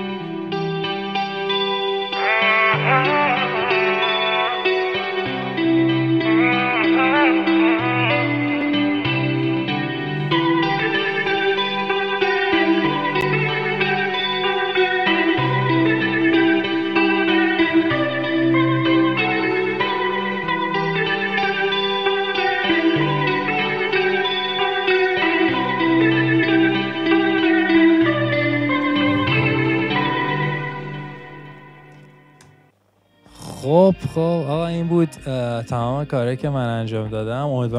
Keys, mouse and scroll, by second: 31.8 •.